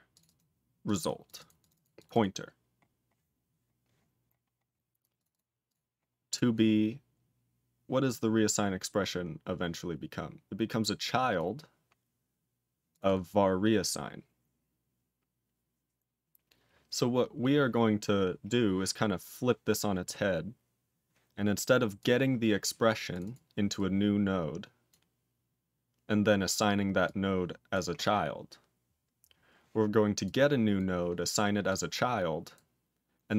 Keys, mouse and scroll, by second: 0.1 click, 0.2 double click, 0.8 click, 0.9 double click, 1.2 click, 1.4 double click, 1.5 click, 1.7 double click, 1.9 click, 2.1 double click, 2.4-3.9 scroll up 11, 4.3 scroll up 4, 5.1 click, 5.2 double click, 5.6 click, 6.1-8.0 scroll down 16, 8.0 click, 8.7-9.1 scroll down 3, 10.6 click, 11.3 click, 12.9 click, 13.0 double click, 21.9 click, 22.5 click, 23.1 click, 23.2 double click, 23.7 click, 24.9 click, 27.0 click, 27.7 click, 30.2 click, 30.7 click, 31.6 click, 32.5 click.